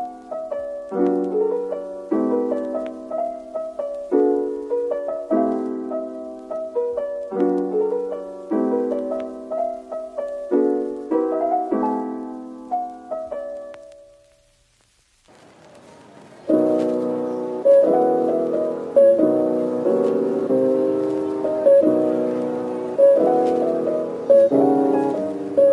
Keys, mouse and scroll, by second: 0.3 typing, 1.4-2.3 typing, 2.9 scroll up 1, 3.7-4.4 typing, 5.4-6.3 typing, 7.8-10.2 typing, 11.6-13.4 typing, 14.8 double click, 15.2-15.7 scroll down 1, 15.7 middle click, 18.1 /, 18.6-19.2 scroll down 1, 19.2 middle click, 21.9 /, 23.4 w, 25.3 middle click.